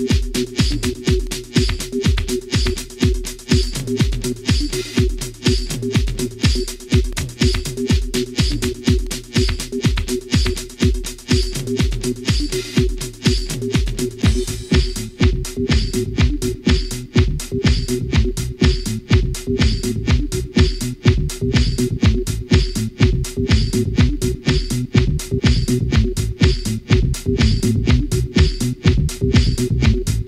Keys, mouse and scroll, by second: 0.8 scroll down 2, 2.1 shift+middle click, 4.0 shift+click, 5.8 shift+9, 6.1 3, 6.7 Return, 9.6 F5, 11.9 F12, 16.0 scroll up 2, 16.9 scroll down 2, 18.7 F11, 21.4-26.1 drag, 27.9 i, 29.8-30.2 drag.